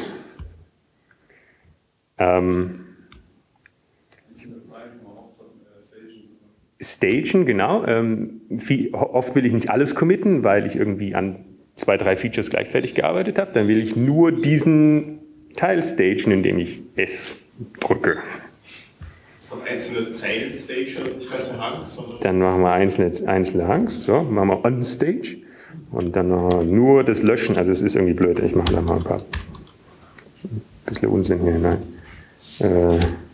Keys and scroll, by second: 2.0 typing, 3.4 typing, 5.0-6.2 typing, 7.3-9.4 typing, 20.1 s, 26.8 shift+u, 29.3 Down, 29.7 Down, 29.7 ctrl+space, 30.8 Down, 32.3 ctrl+g, 32.3 Return.